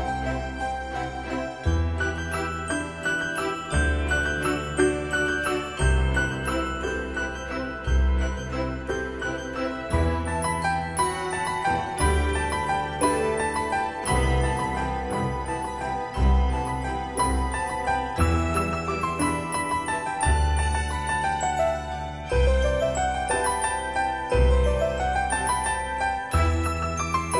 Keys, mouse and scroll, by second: 5.9-8.9 typing, 5.9 Escape, 10.2 space, 12.2 click, 22.2 space, 22.3 click, 24.4 8, 25.1 Return.